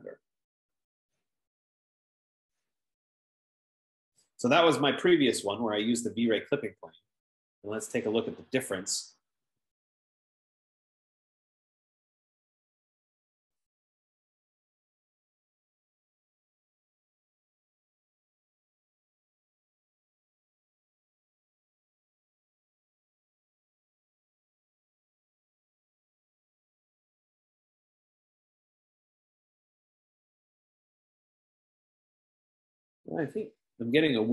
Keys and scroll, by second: 2.1 F15.